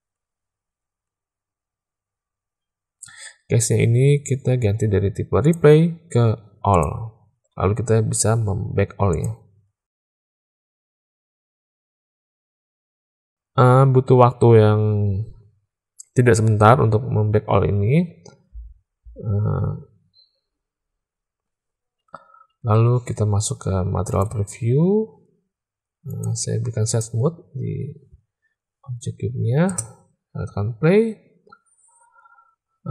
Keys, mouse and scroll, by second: 5.5-6.9 drag, 9.1-22.3 drag, 23.0 z, 26.2 click, 29.6 space.